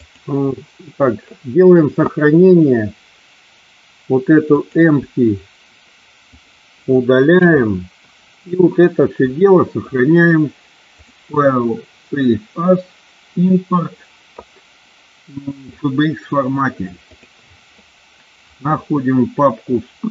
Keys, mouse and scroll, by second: 0.0 click, 4.5 click, 6.2 click, 7.3 Delete, 10.9-15.9 drag.